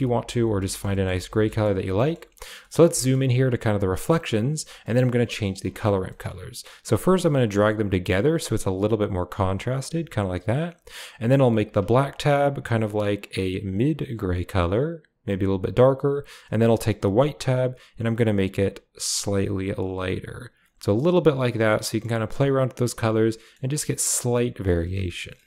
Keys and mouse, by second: 0.6 middle click, 0.9 shift+middle click, 1.2-1.5 middle drag, 1.9-2.2 middle drag, 2.7 middle click, 2.9 shift+middle click, 3.9 middle click, 4.4 click, 4.8 middle click, 6.0 middle click, 6.8-7.4 drag, 8.0-8.7 drag, 9.1 click, 9.8 click, 10.6 click, 11.5 click, 13.1 click, 16.6 click, 17.3 click, 18.3 click, 21.0-22.0 middle drag, 22.8-23.4 middle drag.